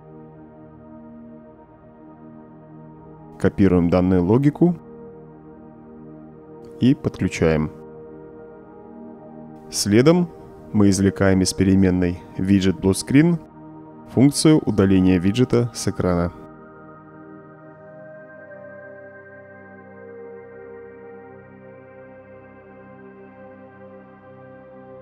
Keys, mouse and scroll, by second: 2.2-2.7 right drag, 3.4-3.9 drag, 4.7 ctrl+c, 5.2 ctrl+v, 6.5-7.2 drag, 8.0-9.3 drag, 10.0-11.1 right drag, 12.2-13.5 drag, 14.1-16.1 typing, 17.8-19.5 typing, 21.4 click, 22.2-23.4 drag, 24.0 click.